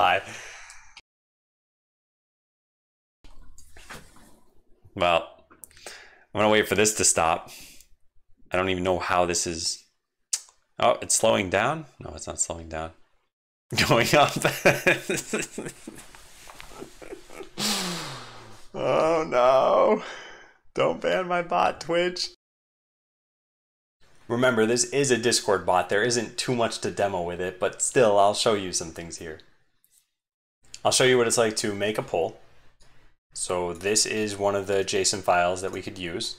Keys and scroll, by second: 0.9 ctrl+alt+shift+\, 3.2 ctrl+alt+shift+\, 23.8 shift+super+Left.